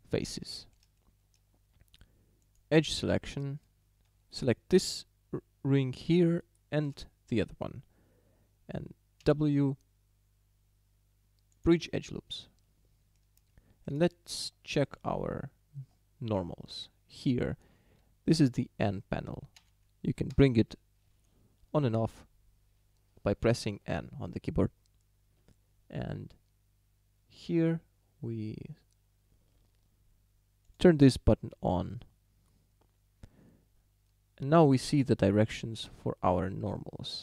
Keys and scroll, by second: 9.3 w, 19.6 n.